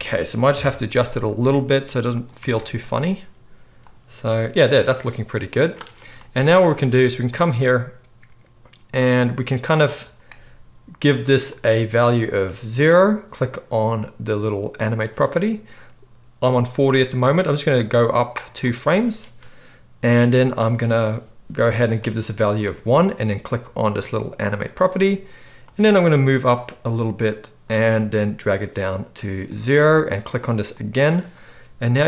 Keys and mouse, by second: 0.4 KP_3, 1.4 g, 2.2-3.7 middle drag, 2.3 Tab, 3.7-14.9 drag, 14.9-16.8 middle drag, 16.8-24.5 drag, 24.5-25.6 middle drag, 25.6-30.8 drag, 30.8-31.9 middle drag, 31.9-32.0 drag.